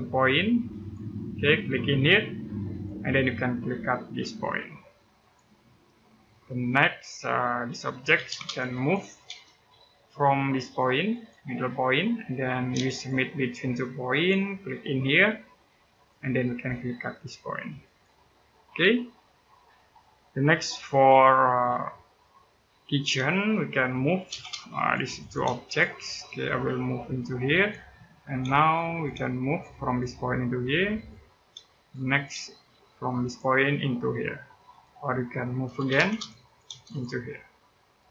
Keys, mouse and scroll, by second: 0.5 click, 1.2 scroll up 1, 2.5 click, 3.6-4.1 scroll up 1, 5.0 click, 5.4-5.8 scroll down 1, 6.1 middle click, 6.8-7.9 scroll up 1, 7.9 m, 8.1 space, 8.2 click, 9.0 space, 10.9 click, 11.3 scroll down 1, 11.6 middle click, 12.0 scroll up 1, 12.7 shift+right click, 13.9 click, 18.1-18.6 scroll down 1, 18.6 middle click, 21.5-22.8 scroll up 1, 23.2 middle click, 23.9 m, 24.1 space, 24.5 click, 25.2 space, 25.4 click, 25.8 scroll down 1, 26.0 middle click, 26.5-27.3 scroll up 1, 27.3 click, 27.7-28.1 scroll up 1, 28.2 space, 28.4 click, 28.9 space, 29.6 click, 31.3 space, 31.6 click, 32.1 space, 33.0 click, 34.8-35.6 scroll up 1, 35.6 m, 35.8 space, 35.9 click, 36.5 space, 36.6 click.